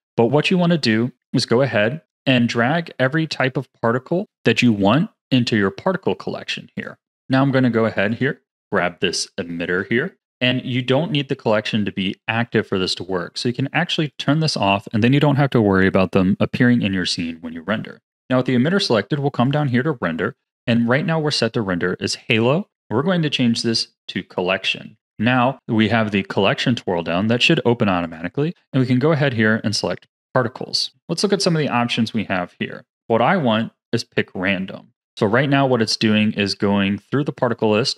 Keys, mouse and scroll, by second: 1.1 click, 6.7 click, 7.0 click, 7.6 scroll down 2, 8.0 click, 8.4-12.0 middle drag, 14.1 click, 19.4-19.9 drag, 19.9-21.3 scroll down 4, 22.1-25.1 drag, 25.1-26.6 scroll down 3, 28.0-30.9 drag, 32.9 click.